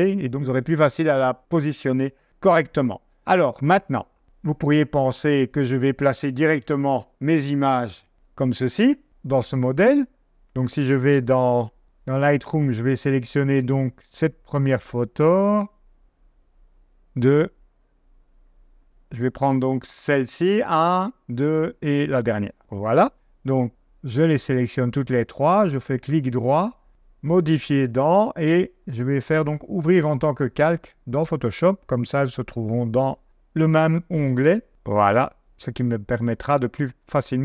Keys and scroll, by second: 9.0 super+Tab, 11.0 super+Tab, 15.3 Right, 16.7 Right, 18.4 Left, 19.6 Left, 20.7 Right, 21.4 Right, 22.6 g.